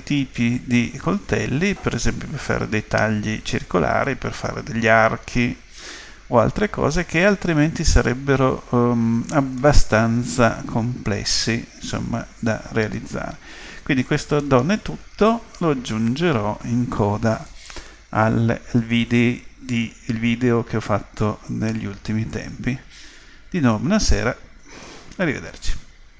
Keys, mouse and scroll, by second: 9.6-11.4 middle drag.